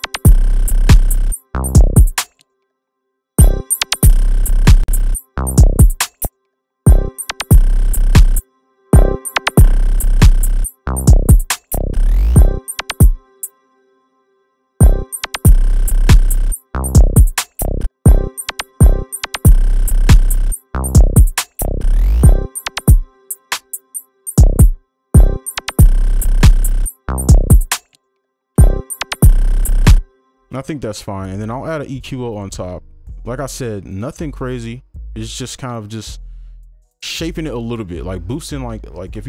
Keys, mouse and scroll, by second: 30.6-32.6 scroll down 1.